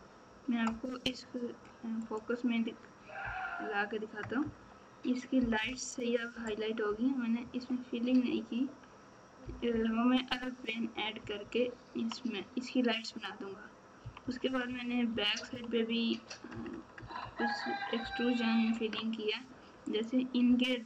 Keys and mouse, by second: 3.2 KP_Divide, 4.2 KP_Add, 5.6 KP_4, 9.4 KP_4, 11.2 KP_6, 14.2 KP_6, 14.4-15.5 KP_6, 16.5 KP_Add, 20.2-20.8 right drag.